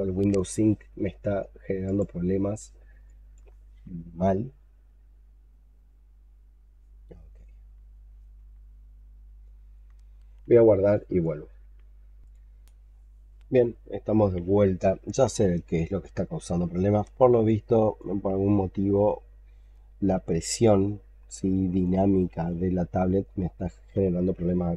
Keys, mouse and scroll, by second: 2.9 alt+click.